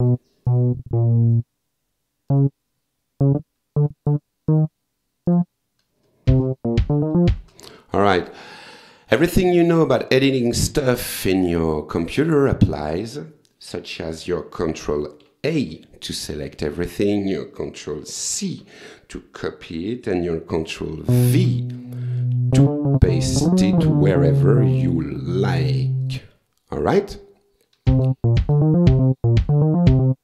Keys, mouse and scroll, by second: 0.0 click, 0.5-1.5 drag, 2.3 click, 3.2-4.3 drag, 4.5 click, 5.3 click, 6.3 space, 7.4 space, 15.2 ctrl+a, 18.3 ctrl+c, 21.1 ctrl+v, 26.0 click, 27.9 space.